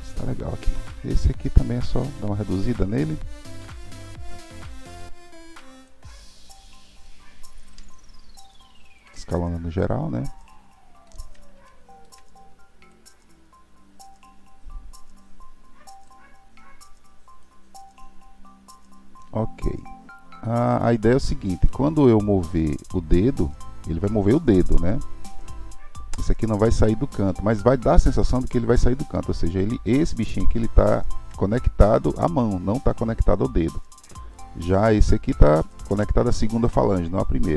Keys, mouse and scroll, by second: 1.5 Tab, 2.0 click, 3.6 l, 4.5 click, 6.1-7.8 middle drag, 7.8 s, 9.3-12.9 middle drag, 12.9 click, 17.4 click, 21.1-21.6 scroll down 5, 21.6-24.8 middle drag, 29.9 click, 30.9 shift+click, 34.3 click, 35.6 shift+click.